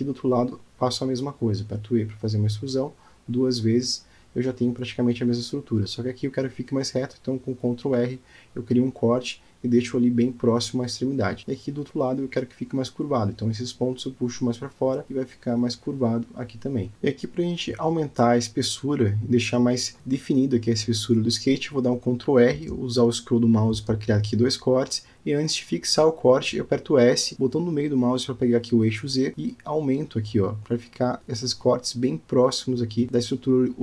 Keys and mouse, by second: 1.1 shift+middle click, 1.6 middle click, 2.1 click, 2.4 shift+click, 2.7 alt+middle click, 3.4 shift+middle click, 5.0 e, 6.2 e, 8.1 ctrl+r, 10.3 click, 11.8 shift+middle click, 12.4 click, 13.0 alt+z, 13.2 click, 13.7 alt+z, 14.3 g, 16.2 click, 17.0 Tab, 17.9 Tab, 18.1 middle click, 18.9 middle click, 19.7 shift+middle click, 21.5 ctrl+r, 26.2 s, 32.2 click, 33.2 Tab.